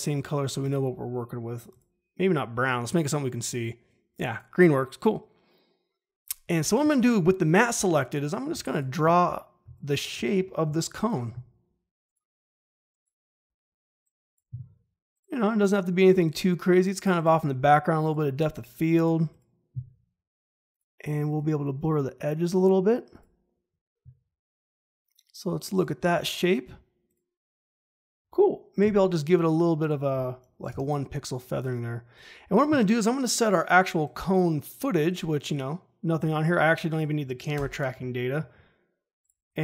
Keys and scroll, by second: 8.5 space, 10.6 g, 28.7 f, 30.6 Return, 37.5 Delete.